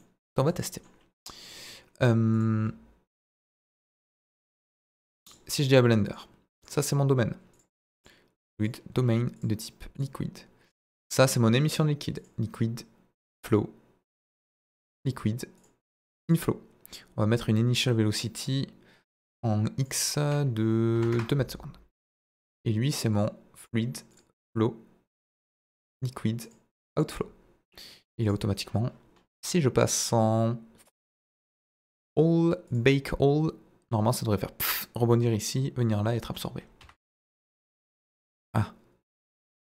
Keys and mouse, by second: 0.7 middle drag, 1.4 click, 2.3 click, 3.7 ctrl+a, 4.4 click, 6.6 click, 7.5 click, 8.0-8.6 drag, 9.5 click, 11.7 click, 12.1-13.3 drag, 14.0-15.0 drag, 15.5-16.3 drag, 17.3 click, 19.9-21.4 drag, 22.1 click, 23.6-24.2 drag, 25.1-25.9 drag, 26.6-27.2 drag, 31.4-32.0 drag, 32.6-36.9 drag, 37.8-38.1 middle drag, 39.1-39.7 drag.